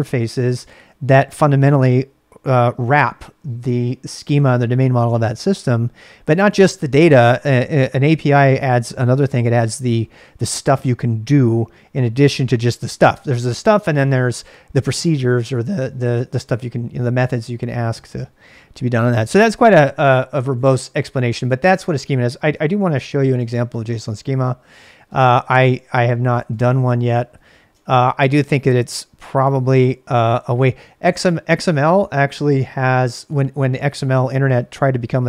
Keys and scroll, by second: 22.7 ctrl+a, 23.0 c, 23.4 shift+space, 25.4-27.9 typing, 29.7 j, 29.9 j, 30.4 j.